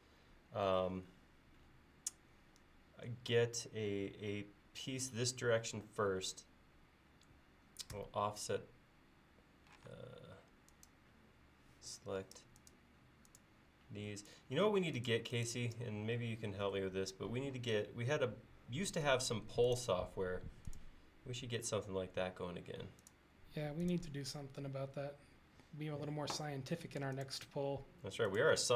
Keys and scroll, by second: 8.0 f, 9.9 space, 19.1 f, 26.4 l.